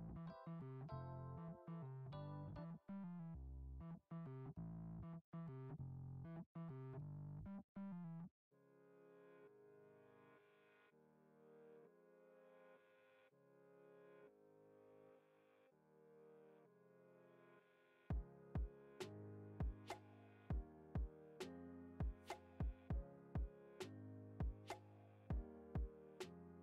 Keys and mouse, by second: 1.8 ctrl+b, 3.5 middle click, 3.9 e, 5.5 a, 5.8 middle click, 6.0 g, 9.6 ctrl+Tab, 10.5 click, 10.9-11.9 middle drag, 12.1-12.5 shift+middle drag, 14.6 click, 14.9 Tab, 16.1 click, 16.4 shift+middle drag, 17.0 click, 17.3-17.6 middle drag, 18.3 i, 19.7 middle drag, 20.8 shift+middle drag, 22.1 s, 23.0 e, 24.6 e.